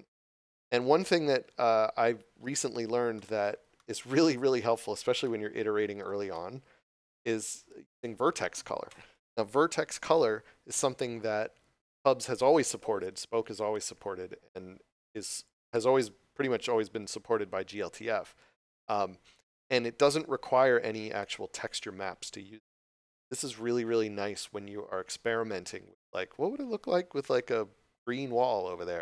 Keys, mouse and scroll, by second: 2.4 click, 3.1 middle click.